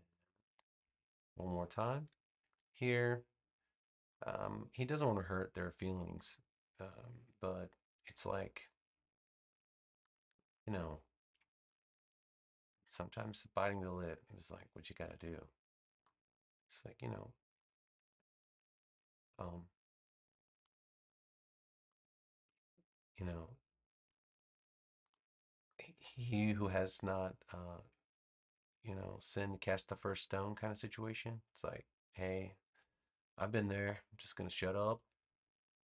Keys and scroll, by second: 1.7 super+v, 18.0 a.